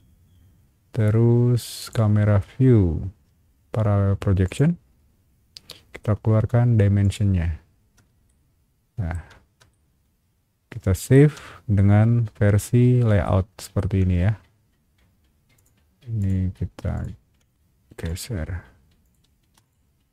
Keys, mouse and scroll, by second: 1.8 click, 4.4 click, 7.0 click, 8.2 shift+middle click, 9.3 scroll down 1, 9.7-11.1 shift+middle drag, 13.2 shift+scroll up 2, 13.2 shift+middle click, 15.5 shift+click, 16.2 shift+click, 16.9 shift+click, 17.9 m, 18.0 click, 19.0 click, 19.2 space, 19.6 click.